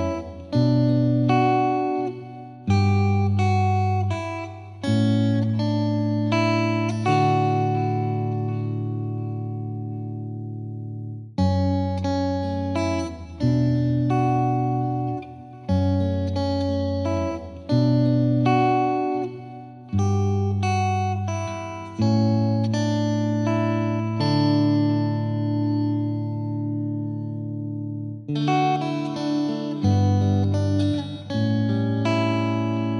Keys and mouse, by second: 0.2 g, 3.3 Escape, 4.3 F3, 4.5 F3, 6.6 F2, 8.2 click, 9.9 click, 10.8 shift+click, 13.0 click, 13.7 click, 19.6 click, 22.9 click, 26.5 click, 27.5 click, 29.4 right click, 29.6 click, 30.3 click, 32.7 click.